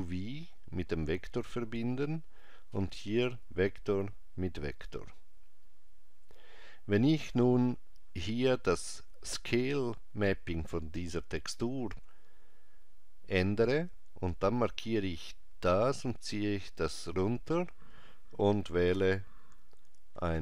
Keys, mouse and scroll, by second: 3.4 click, 13.9 click.